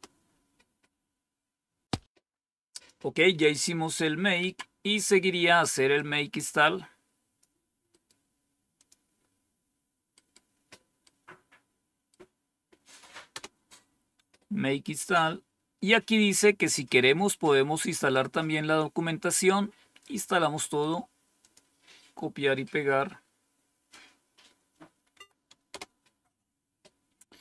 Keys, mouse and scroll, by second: 2.6 click, 4.3 Page_Down, 5.8-7.3 drag, 8.7 click, 13.2 Return, 18.0-19.9 drag, 21.3 click, 25.0 Tab, 25.6 Return.